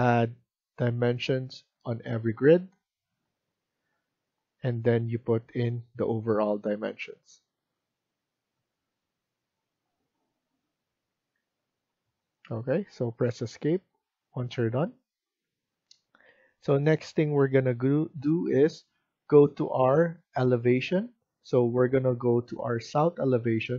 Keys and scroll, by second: 11.2 Escape, 11.4 Escape.